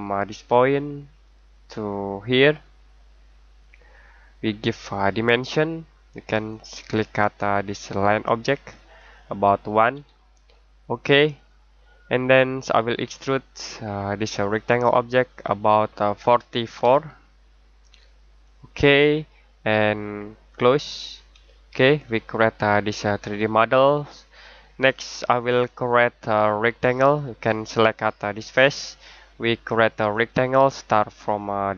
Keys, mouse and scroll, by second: 7.9 click, 9.9 typing, 11.3 click, 18.4 click, 21.4 middle click, 26.9 click.